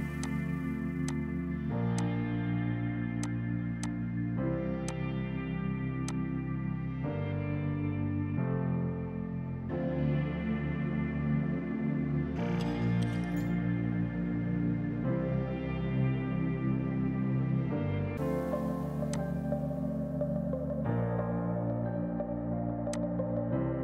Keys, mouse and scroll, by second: 19.1 click, 20.5 KP_1, 21.3 KP_Enter, 23.0 click.